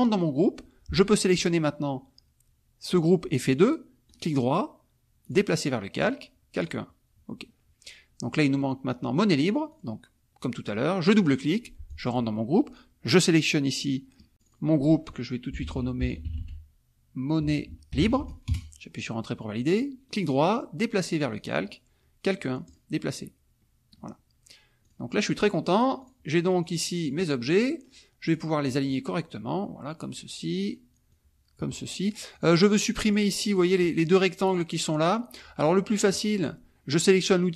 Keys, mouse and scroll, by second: 4.1 right click, 5.2 click, 6.6 click, 8.2-9.8 middle drag, 9.8 click, 11.8 click, 14.3 click, 15.5 m, 16.2 n, 17.6-18.5 typing, 20.0 right click, 21.3 click, 22.6 click, 23.5 middle click, 24.8 click, 25.4 click, 26.1-27.6 drag, 28.7-30.3 drag, 30.7 click, 31.1-32.2 drag, 32.4 click, 33.2 click, 33.6 click, 34.4 click, 34.9 click.